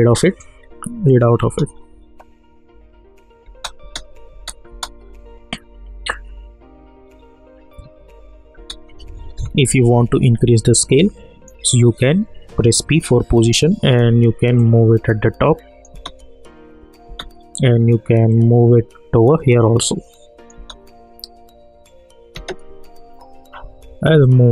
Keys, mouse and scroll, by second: 1.4 space, 3.4 space, 8.5 space, 9.8 s, 10.2-12.9 drag, 12.6-13.8 typing, 14.6-15.9 drag, 15.9 space, 18.3-20.5 drag, 20.5 space, 24.2 click.